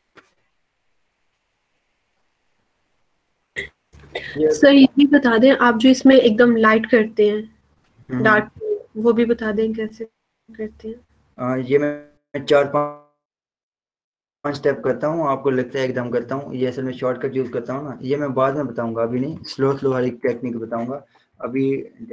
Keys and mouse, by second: 4.2 Return, 8.1 click, 9.0 click, 15.6 click, 17.5 ctrl+0, 17.7 v, 20.0-21.6 drag.